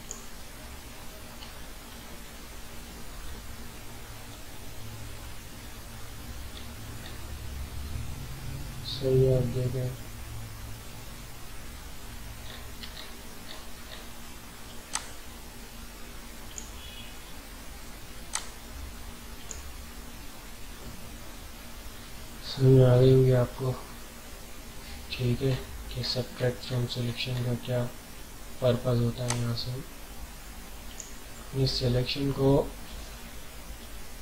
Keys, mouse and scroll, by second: 1.1-2.7 scroll down 4, 2.7 typing, 6.5 alt+scroll up 1, 9.0 scroll up 1, 12.3 scroll up 1, 12.9 alt+scroll up 1, 13.5 alt+scroll up 1, 14.9-20.8 alt+drag, 20.0 typing, 20.8 alt+scroll down 1, 21.7 typing, 21.8 alt+scroll down 1, 23.0 ctrl+scroll down 1, 25.5 alt+scroll up 1, 25.6 typing, 27.3 alt+scroll up 1, 29.3-31.9 alt+drag, 31.9 alt+scroll down 1, 32.5 alt+scroll down 1, 33.1 alt+scroll down 1, 33.6 alt+scroll down 1.